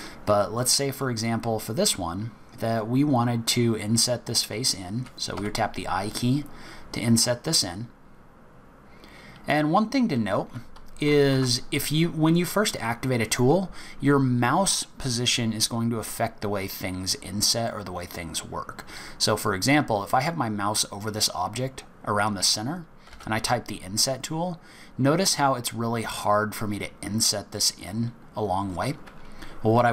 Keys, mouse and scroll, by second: 0.4-1.9 scroll up 2, 11.3 ctrl+z, 12.2 click, 17.7 middle click.